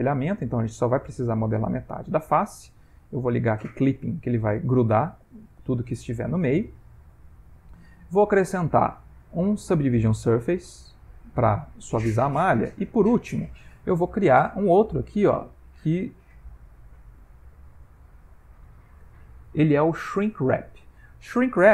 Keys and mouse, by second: 3.5 click, 7.8 click, 12.7 click.